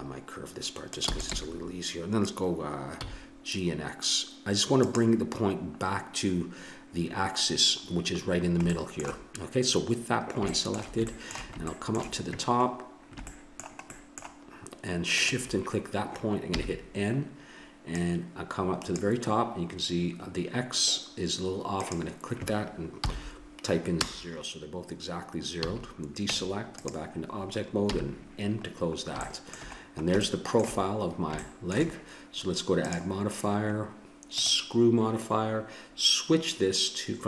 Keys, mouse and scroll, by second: 1.1 e, 1.4 g, 7.4 middle click, 7.7-8.7 middle drag, 10.5 middle click, 12.7-14.2 middle drag, 15.1-16.9 drag, 16.5 n, 17.9-19.7 drag, 21.8-24.3 drag, 25.5 a, 26.3 Tab, 27.9 n, 28.8-29.9 middle drag, 30.5 middle click, 31.3 middle click, 31.5-32.7 middle drag, 32.7-35.3 drag.